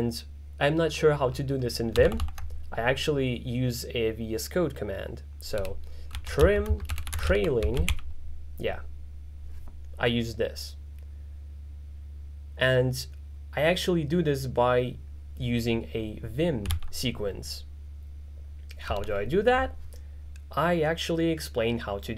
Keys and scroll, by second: 2.1 alt+shift+], 5.7-8.4 typing, 16.9 alt+w.